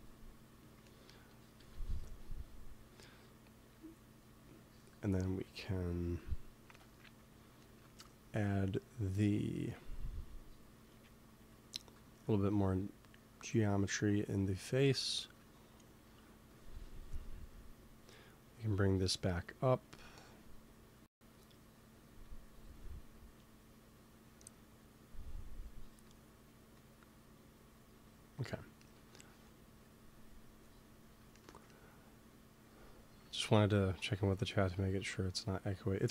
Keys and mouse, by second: 0.8 middle click, 1.5 KP_3, 3.7-6.6 drag, 5.4 ctrl+s, 7.6-8.9 middle drag, 8.9-15.8 drag, 16.3 f, 16.5 click, 17.8-26.4 drag, 29.7-31.7 drag, 32.3-33.9 drag, 33.1 ctrl+s.